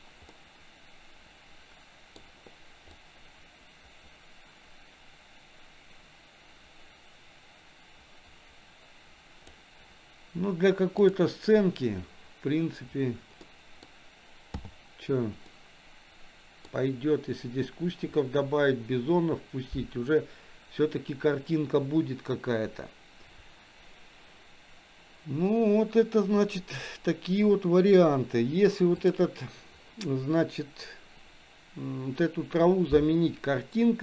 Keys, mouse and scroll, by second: 0.6 scroll up 1, 0.9-2.6 middle drag, 3.5-10.5 drag, 11.2 click, 13.7 middle click, 14.8 h, 15.7-17.2 middle drag, 29.0-29.3 drag.